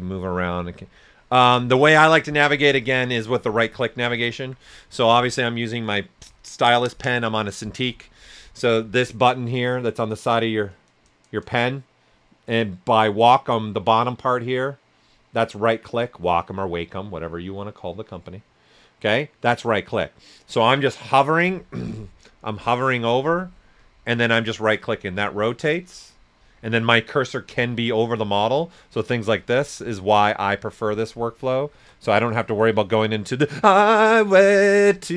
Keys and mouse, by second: 4.1 alt+right click, 24.0-27.4 right drag, 27.4 s, 27.5 click, 28.2 alt+right click, 29.6 s, 29.7 click, 30.4 alt+right click, 31.2 click, 31.7 s, 31.8 click.